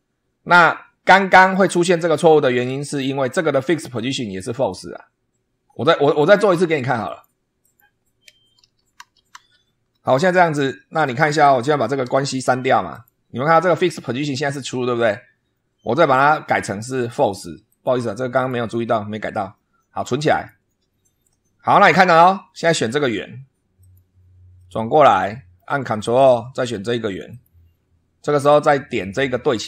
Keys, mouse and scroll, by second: 1.4 click, 2.8 click, 3.8 click, 6.1 click, 7.0 click, 7.5 click, 8.5 ctrl+z, 10.3 click, 11.0 click, 12.0 Delete, 12.8 click, 15.9 click, 17.0 click, 17.6 click, 18.2 click, 20.2 click, 22.0-22.4 scroll up 2, 23.7 click, 24.5-25.7 middle drag, 27.2 ctrl+click.